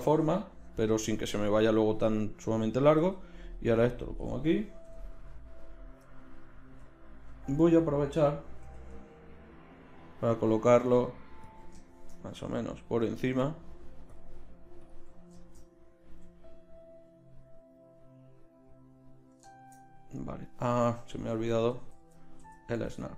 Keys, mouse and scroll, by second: 3.0 g, 4.8 i, 8.6 g, 11.4 click, 11.8 right click, 11.9 click, 12.0 right click, 16.1 middle click, 21.6 ctrl+z, 21.8 ctrl+z, 22.0 ctrl+z, 22.4 ctrl+z.